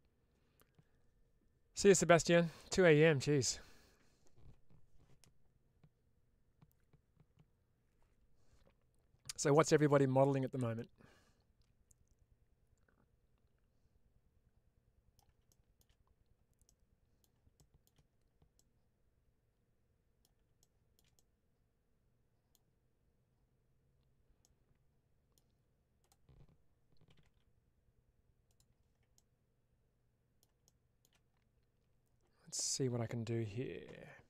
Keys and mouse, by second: 10.6-15.0 middle drag, 15.3 shift+middle click, 16.5 middle click, 18.4-20.1 middle drag, 21.0-22.4 middle drag, 24.4 middle click, 25.9-28.4 drag, 29.0-30.2 middle drag.